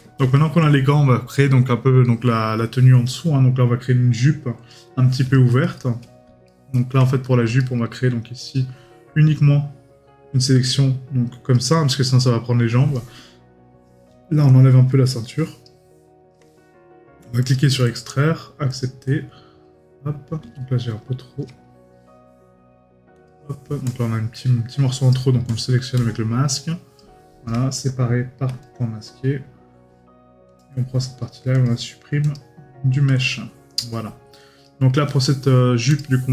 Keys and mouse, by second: 6.5 right click, 34.6 right click.